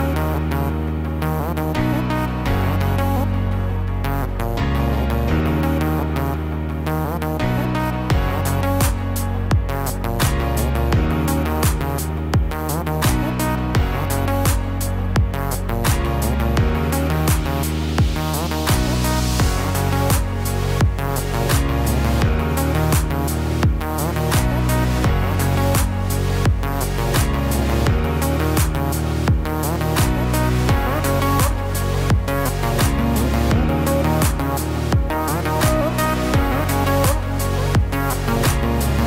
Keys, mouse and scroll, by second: 3.7 click, 4.4 shift+click, 9.9 s, 17.4 g, 19.7-20.4 scroll up 6, 20.5 shift+middle click, 21.5-22.2 scroll up 3, 22.4 shift+middle click, 25.9 r.